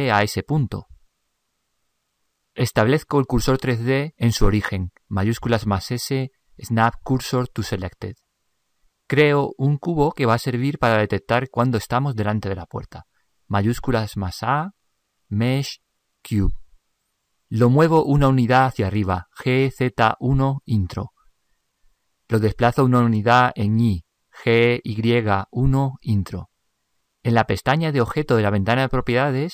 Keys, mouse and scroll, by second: 5.8 shift+s, 13.9 shift+a, 19.6 g, 24.5 g.